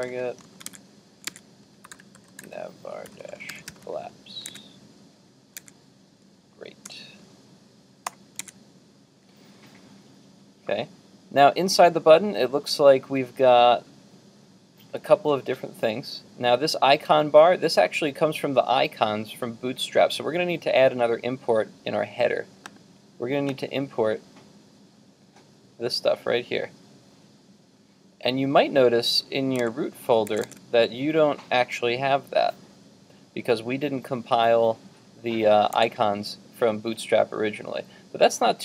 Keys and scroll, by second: 8.4 super+Tab, 29.6 super+Tab, 32.6 super+Tab, 35.8 super+Tab.